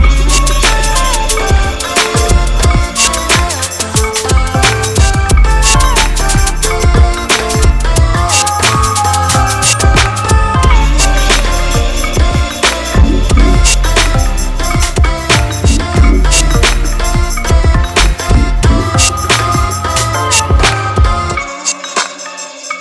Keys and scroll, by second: 5.9 F4, 11.6 F3, 22.7 shift+Page_Down.